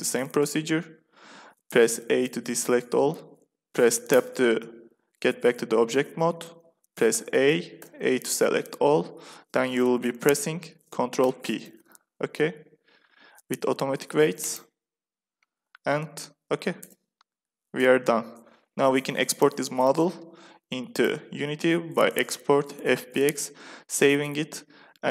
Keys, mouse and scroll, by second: 1.8 a, 4.0 Tab, 7.1 a, 7.7 a, 11.2 ctrl+p, 16.0 click, 16.7 Tab, 17.3 z, 20.8-22.9 drag.